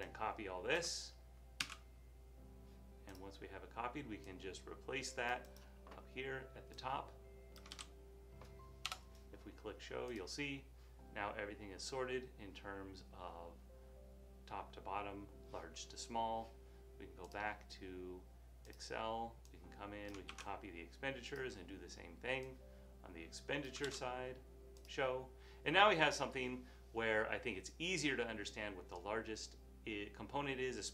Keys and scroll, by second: 1.7 super+c, 7.8 super+v, 20.4 super+c, 23.9 super+v.